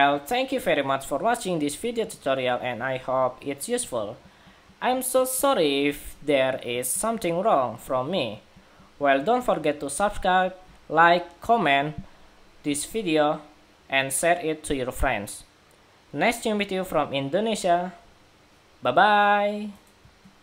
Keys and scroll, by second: 20.1 shift+super+z, 20.3 shift+super+2.